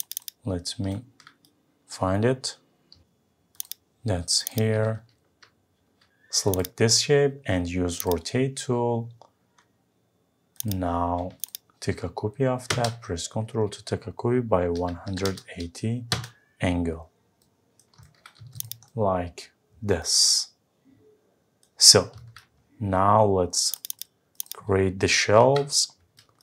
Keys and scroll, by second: 5.1 Escape, 16.1 Return, 25.3 Delete.